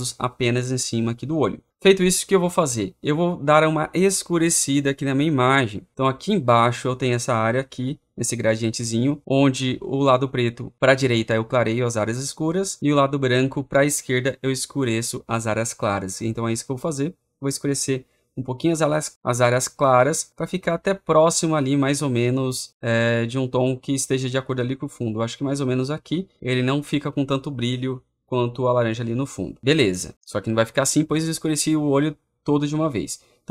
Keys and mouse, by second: 26.4-27.4 drag.